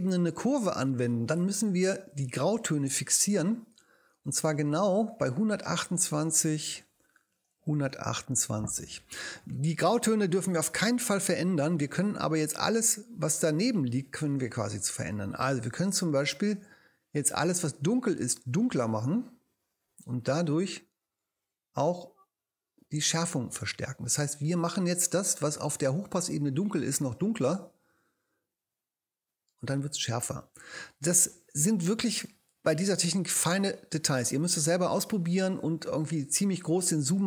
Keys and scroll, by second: 6.1-8.5 typing, 7.3 Tab.